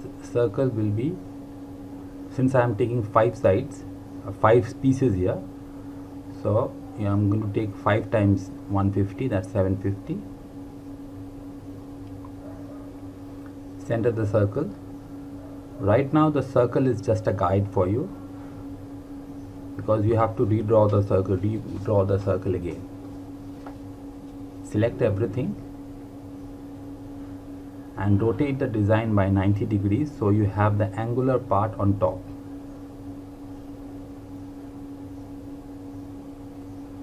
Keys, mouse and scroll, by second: 1.6 l, 2.3 click, 9.1 click, 10.5 KP_7, 10.6 KP_5, 11.0 KP_0, 12.6 click, 22.2 ctrl+Num_Lock, 23.1 ctrl+a, 26.6 click.